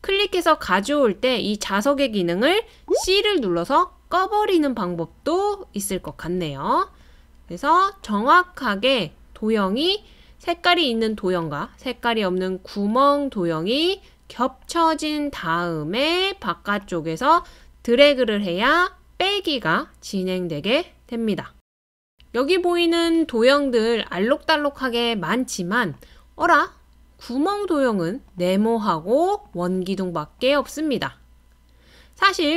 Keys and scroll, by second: 3.0-3.9 typing.